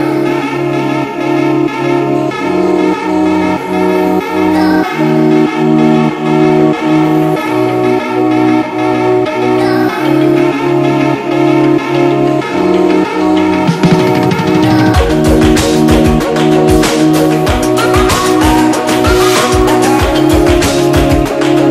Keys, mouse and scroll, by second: 0.8-1.4 space, 6.0 space, 6.1 ctrl+z, 7.7 click, 8.5 right click, 9.5 click, 12.0 click, 12.5-16.5 alt+drag, 18.9 click, 19.1 ctrl+=, 19.6-21.4 typing, 19.7 click, 20.1 click, 20.6 ctrl+=, 21.1-21.6 click, 21.6 click.